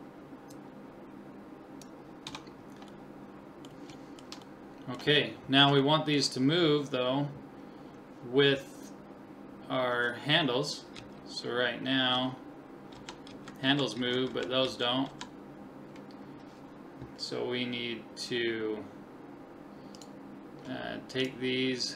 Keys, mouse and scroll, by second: 0.5 click, 2.4 Tab, 2.6-7.8 middle drag, 9.1-9.7 scroll up 1, 9.7-11.6 middle drag, 9.7-11.0 scroll up 1, 11.0 Right, 11.0 scroll up 1, 12.1 Right, 13.0 Left, 13.3 Right, 13.7 Left, 14.0 Right, 14.3 Left, 14.7 Right, 15.1 Left, 18.1-20.0 middle drag, 20.0-21.9 right drag.